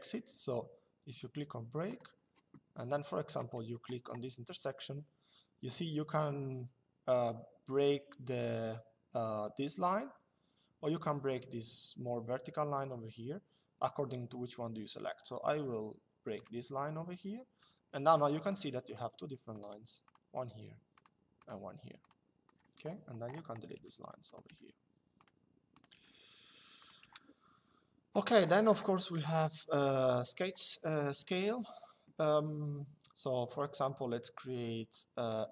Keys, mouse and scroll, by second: 1.6 click, 16.0 click, 17.3 Escape, 18.1 click, 23.4 Delete, 24.0 click, 24.2 Delete, 25.6 Delete, 26.7 Delete, 28.9 middle click, 31.0 click, 35.0 click.